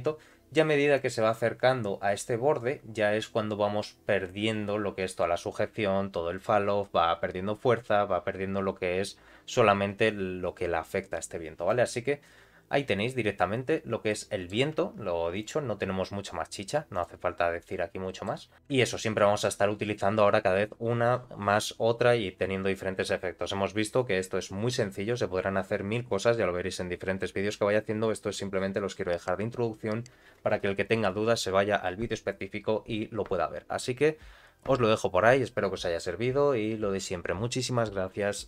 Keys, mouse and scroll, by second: 0.9-11.4 drag, 11.5 click, 12.2-13.0 scroll down 1, 13.3-14.0 scroll down 1, 14.0 middle click, 14.7-15.2 scroll up 1, 15.3 click, 16.9 click, 17.5 click, 18.0 middle click, 18.5 scroll up 1, 18.7 shift+middle click.